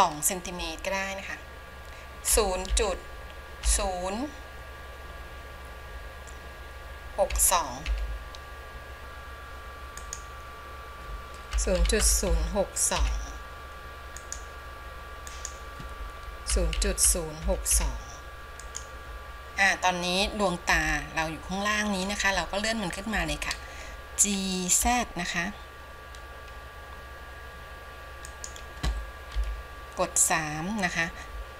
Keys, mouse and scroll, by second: 15.7-20.9 drag, 21.4-22.9 shift+middle drag, 24.9 g, 30.0 KP_3.